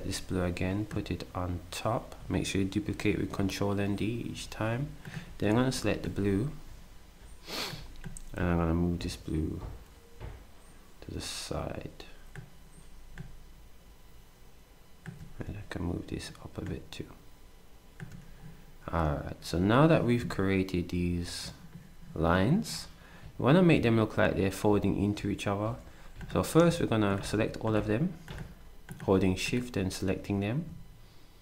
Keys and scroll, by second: 5.5 ctrl+d.